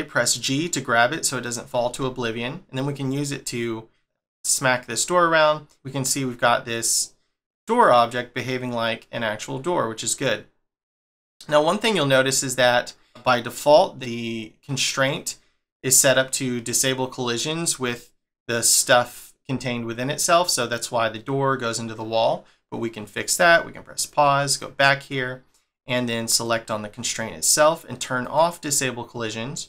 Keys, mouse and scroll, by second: 1.4 click, 1.8 g, 23.9 click, 24.4 click, 26.3 click, 28.2 click.